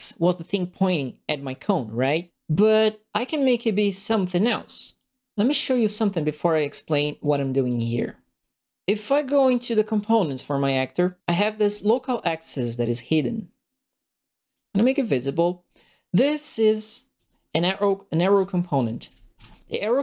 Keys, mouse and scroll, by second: 7.2 click, 9.6 click, 11.6 click, 14.4 click, 16.8-20.0 right drag, 17.2-19.3 typing.